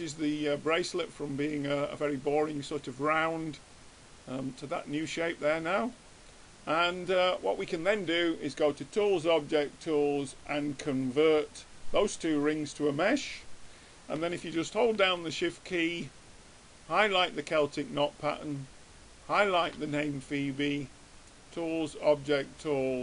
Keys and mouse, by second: 7.8-9.6 drag, 16.8-17.8 drag, 19.4 click, 21.0-22.6 drag.